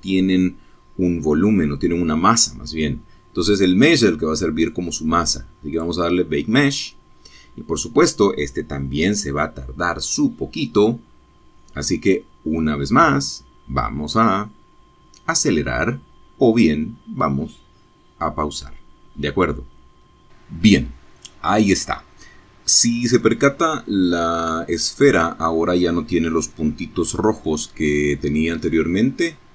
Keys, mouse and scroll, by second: 3.2 click, 25.3-26.4 drag, 26.4 middle click, 26.5-27.0 scroll up 2, 27.1-27.5 scroll down 2, 28.0 shift+middle click, 28.9-29.3 shift+scroll down 1.